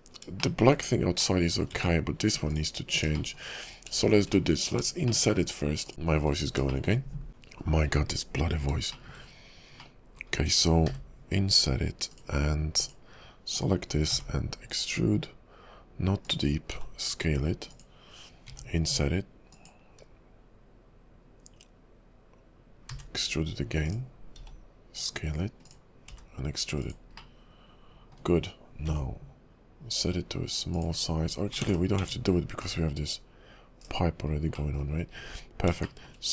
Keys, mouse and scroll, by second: 0.5 shift+middle click, 1.4 middle click, 1.7 Tab, 2.5 click, 3.1-4.2 scroll up 3, 3.3 shift+middle click, 4.5 middle click, 4.9-5.2 scroll down 1, 5.2 shift+middle click, 5.8 shift+click, 6.0 middle click, 6.8 middle click, 9.1 shift+middle click, 9.3 KP_5, 10.0 middle click, 10.9 i, 12.5 scroll up 2, 12.8 click, 14.2 e, 16.7 s, 18.5 i, 23.0 e, 24.4 s, 26.2 e, 27.3 middle click, 31.1-31.5 scroll down 5, 31.1 i, 31.7 ctrl+z, 31.9 Tab, 32.4 scroll down 2, 32.7 /, 33.9 ctrl+l, 33.9 /, 34.4 scroll up 1, 34.7 middle click, 35.0-35.7 scroll up 9, 36.0 shift+middle click.